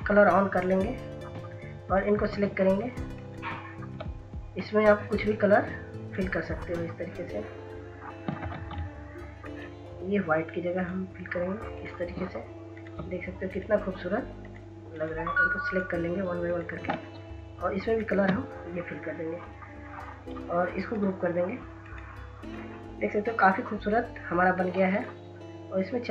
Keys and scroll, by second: 8.7 ctrl+z.